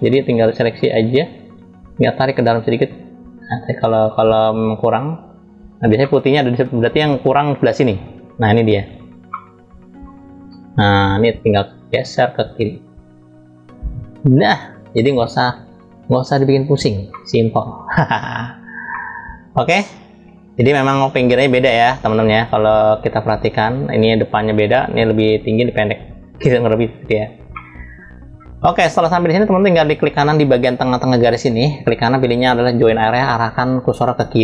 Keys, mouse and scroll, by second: 0.2-5.4 drag, 5.8-7.0 middle drag, 7.5 click, 9.0-10.3 middle drag, 10.4-12.0 drag, 12.3-14.3 drag, 15.9 click, 17.0 middle click, 17.9 scroll down 1, 18.0 scroll up 1, 18.1 scroll down 1, 18.9-20.5 middle drag, 20.5-22.4 scroll up 1, 22.4 scroll down 3, 22.5-24.1 scroll down 3, 27.2 middle click, 31.5-32.7 right drag.